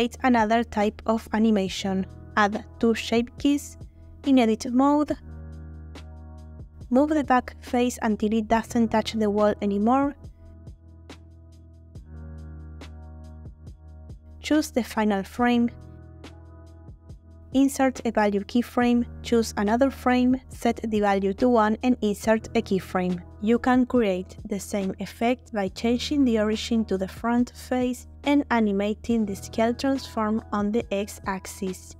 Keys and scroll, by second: 0.6 Delete, 5.6 Tab, 6.1 ctrl+Tab, 6.8 3, 8.3 x, 13.4 Tab, 31.7 space.